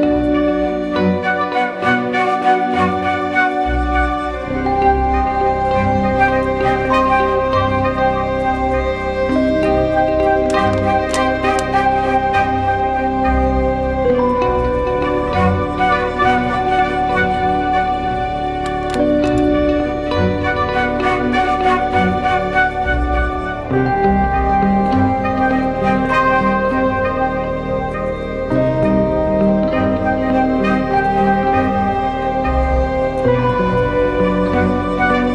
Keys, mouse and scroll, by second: 2.4-3.9 scroll up 1, 6.6-9.1 scroll down 1, 14.7 ctrl+=, 14.9 ctrl+=, 15.0 ctrl+=, 15.1 ctrl+=, 15.8 space, 16.9 ctrl+t, 18.0 alt+shift+click, 21.1 alt+shift+click, 25.6 alt+shift+click, 28.0 alt+shift+click, 29.6 Return, 30.2 Down, 30.4 Down, 33.1 ctrl+-, 33.3 ctrl+-, 34.4 ctrl+=, 34.6 ctrl+=, 34.8 ctrl+=.